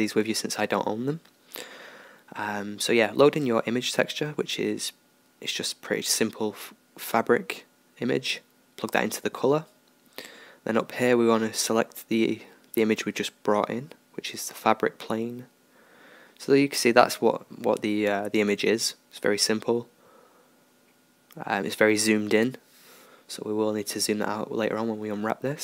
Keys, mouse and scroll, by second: 0.0 click, 3.2-5.0 drag, 9.7-11.5 drag, 12.7-14.5 drag, 17.2-25.6 middle drag.